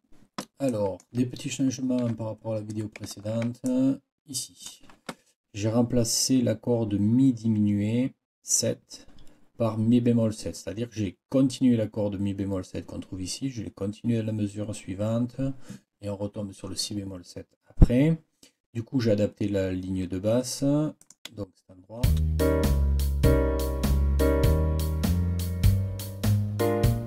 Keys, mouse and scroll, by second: 0.7 click, 1.6 ctrl+scroll up 2, 3.1-3.4 ctrl+scroll up 2, 3.6 ctrl+click, 3.8-4.8 ctrl+scroll up 1, 21.0 click.